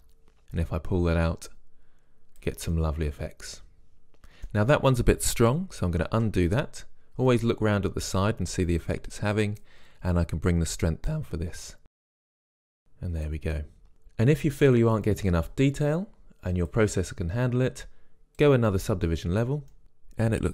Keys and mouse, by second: 0.0 Return, 0.6-1.9 middle drag, 2.8 click, 3.1-6.3 middle drag, 6.3 ctrl+z, 7.4-9.1 middle drag, 11.8 click, 12.4 middle click, 12.8 click, 13.0 middle click, 19.8 middle click, 20.0 click.